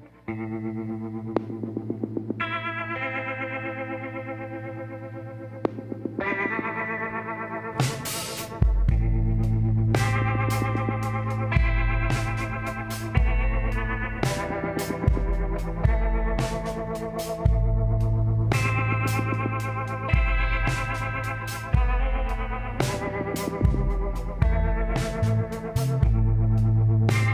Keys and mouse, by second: 1.9-3.6 middle drag, 2.7 z, 3.8 middle click, 4.8-6.4 drag, 6.4 middle click, 7.2 z, 9.5-12.6 drag, 11.8 f, 14.0 a, 14.6 click, 15.8 middle click, 20.5 click, 23.2-25.0 drag, 26.1-27.3 drag.